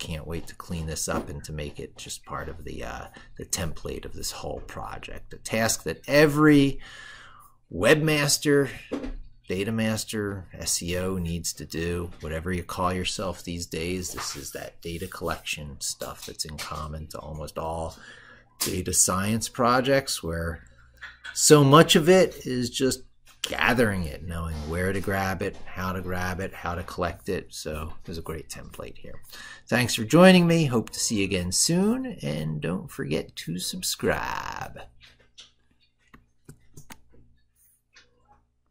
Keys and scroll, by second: 36.4 ctrl+alt+y.